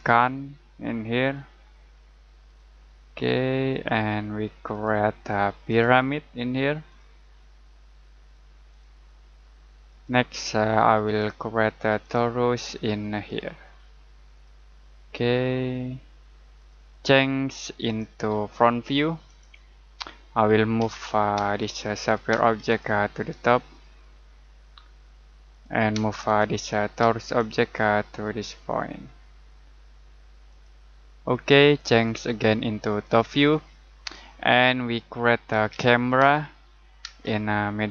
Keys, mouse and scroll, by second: 20.8 m, 21.3 space, 21.7 click, 22.3 space, 22.6 click, 25.5 click, 25.9 space, 26.2 click, 27.0 space, 27.2 click, 30.5 click, 33.9-34.5 scroll down 1, 34.5 middle click, 35.2-37.0 typing.